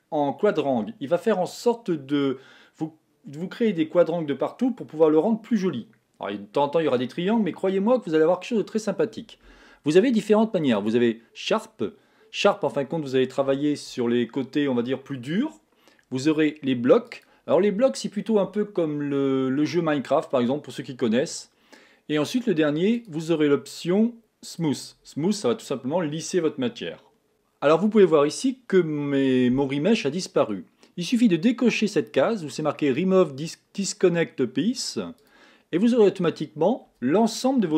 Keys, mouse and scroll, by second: 11.1 click, 23.7 click, 35.9 click, 36.4-37.1 scroll down 2.